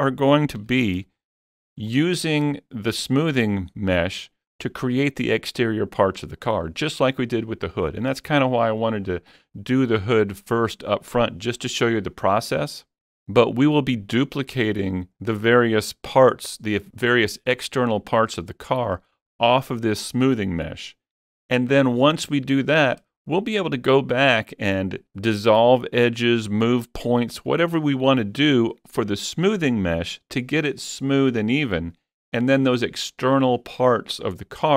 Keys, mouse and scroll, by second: 0.8 alt+z, 1.8 shift+middle click, 3.2-3.7 scroll down 1, 4.3 middle click.